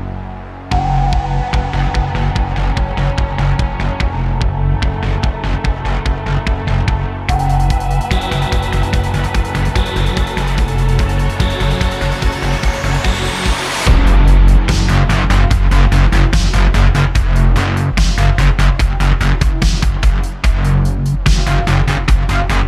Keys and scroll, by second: 0.0 q, 1.8 Tab, 2.2 super+r, 2.9 3, 4.7 Tab, 4.9 super+Caps_Lock, 5.4 z, 8.5 e, 9.2 s, 10.1 Tab, 16.4 e, 17.3 s, 21.8 Tab.